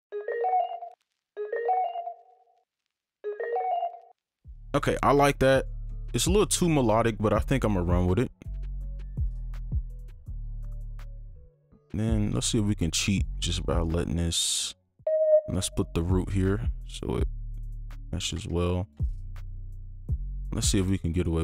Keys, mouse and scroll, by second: 0.9 space, 5.5 right click, 6.0 click, 6.8 right click, 7.7 ctrl+click, 8.8 ctrl+Down, 11.0 alt+click, 14.5 right click, 16.8 alt+click, 18.6 ctrl+click, 20.3 right click, 21.1 alt+click.